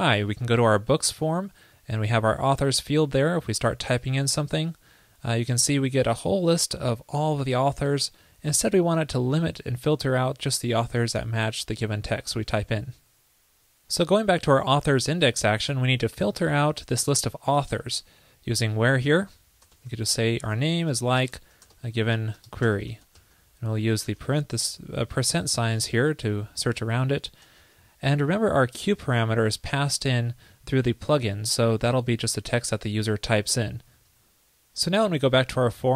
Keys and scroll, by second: 29.0 ctrl+p.